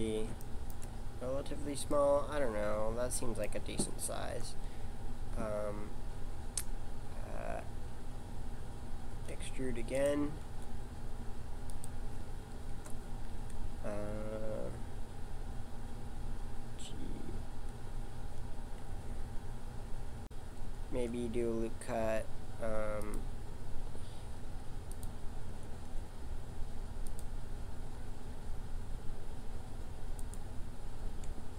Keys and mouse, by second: 4.3 KP_7, 9.1 e, 10.5 s, 12.7 KP_1, 18.1 e, 20.8 ctrl+r, 25.7 ctrl+r.